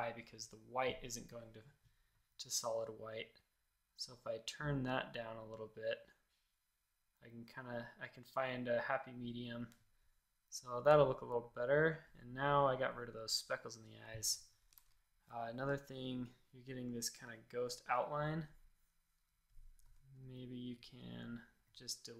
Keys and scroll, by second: 14.7 shift+super+a, 19.8 a.